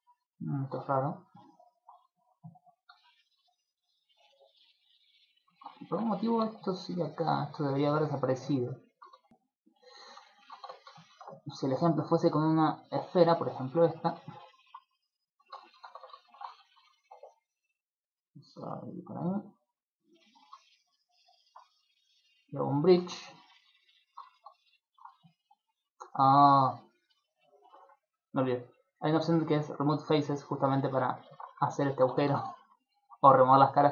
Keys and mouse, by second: 0.9 z, 1.3 middle click, 2.1 z, 2.6 Tab, 3.1 middle click, 4.1 shift+middle click, 4.5 middle click, 5.3 middle click, 5.5 shift+middle click, 5.7 ctrl+middle click, 6.4 Tab, 7.9 click, 8.2 middle click, 9.1 Tab, 9.3 ctrl+middle click, 10.1 ctrl+middle click, 10.3 shift+middle click, 10.6 Tab, 11.1 shift+a, 13.1 shift+middle click, 13.6 g, 14.0 click, 14.3 shift+middle click, 14.6 middle click, 15.4 shift+middle click, 15.6 ctrl+middle click, 15.9 Tab, 16.3 shift+middle click, 16.5 a, 18.3 click, 18.5 b, 20.1 middle click, 20.3 ctrl+middle click, 20.6 middle click, 22.5 click, 23.1 middle click, 23.3 ctrl+middle click, 23.8 middle click, 24.3 shift+middle click, 24.5 middle click, 25.5 click, 26.8 click, 27.3 middle click, 27.5 ctrl+middle click, 28.6 click, 29.1 click, 29.7 click, 30.1 click, 30.7 middle click, 31.2 shift+middle click, 31.8 ctrl+middle click, 32.1 Tab, 32.5 shift+middle click, 32.9 middle click, 33.1 ctrl+middle click, 33.5 middle click, 33.7 shift+middle click.